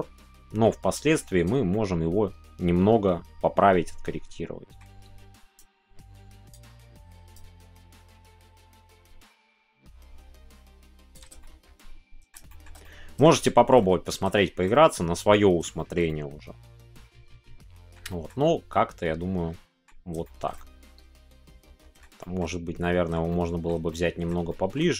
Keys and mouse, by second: 5.7-11.4 drag, 11.4 middle click, 12.4 shift+middle click, 12.8 middle click, 13.8 middle click, 14.4 shift+middle click, 14.7 middle click, 15.8 shift+middle click, 16.0-18.2 middle drag, 18.4-19.8 middle drag, 20.4 shift+middle click, 20.5-21.9 middle drag, 22.3 middle click, 22.8 middle click, 23.2-24.3 shift+middle drag, 24.4 shift+middle click.